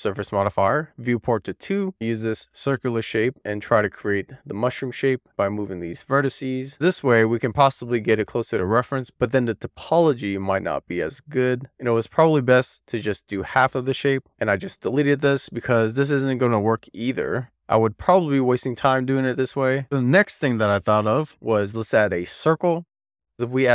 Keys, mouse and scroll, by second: 0.1 scroll up 1, 1.4 click, 1.9 scroll up 1, 2.0 r, 2.2 click, 2.7 Tab, 3.1 click, 3.3 alt+z, 3.4 alt+middle click, 3.6 scroll up 1, 3.8 click, 4.1 alt+z, 4.5 click, 4.6 super+z, 4.9 middle click, 5.0 scroll down 3, 5.2 shift+click, 6.3 click, 6.9 middle click, 7.2 alt+z, 7.5-7.9 scroll up 1, 7.9 middle click, 8.0-8.4 scroll down 2, 8.4 middle click, 8.7 alt+click, 9.2 alt+middle click, 9.5 click, 10.0 scroll up 2, 10.2 middle click, 10.5 scroll down 1, 10.6 middle click, 13.4 Tab, 17.5 x, 20.9 shift+a.